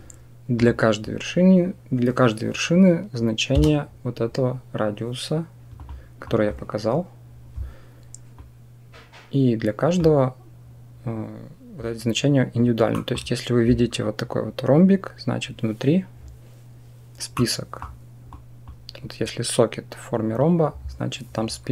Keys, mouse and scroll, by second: 3.4 Tab, 5.6 click, 6.1 click, 8.2-9.8 drag, 12.9 middle click, 17.2 click, 17.6 middle click, 18.1 click.